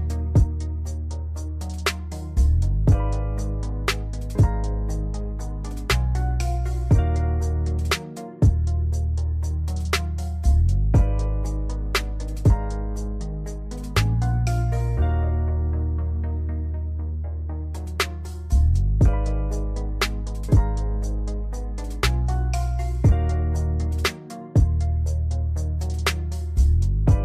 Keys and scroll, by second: 0.1 space, 3.8 space, 5.4 space, 12.1 space, 13.9 space, 14.5 Delete, 15.0 space, 17.2 space, 24.4 space, 26.7 space.